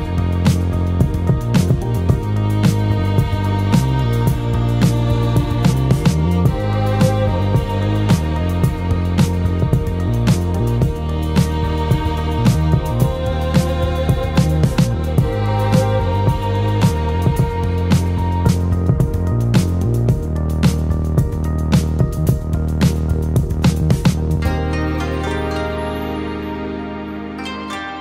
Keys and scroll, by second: 12.5 ctrl+space, 13.1 ctrl+space.